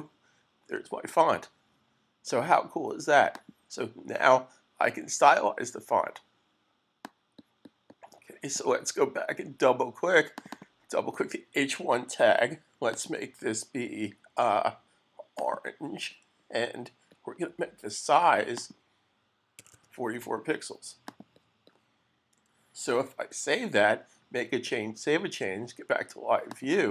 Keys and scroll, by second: 22.8 super+s.